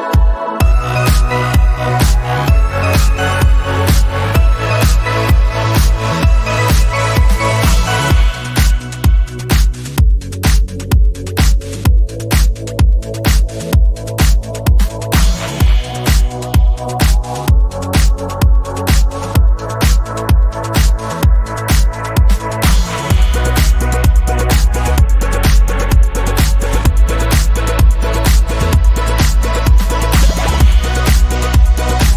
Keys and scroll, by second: 6.3-10.0 typing, 7.6 Tab, 13.5 typing, 21.4 ctrl+[.